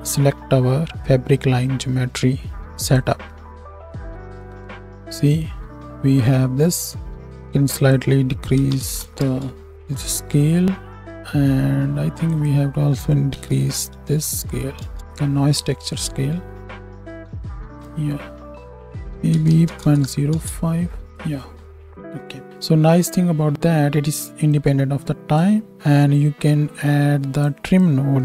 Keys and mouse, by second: 19.7 KP_0.